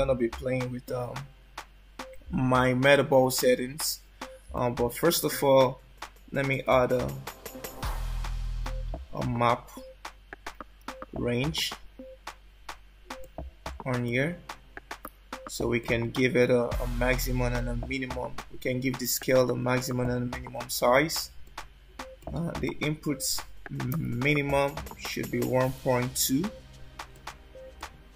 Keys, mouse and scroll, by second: 4.6 click, 6.8 shift+a, 15.8 click, 17.6 click, 20.2 click, 21.6 click, 22.8 click.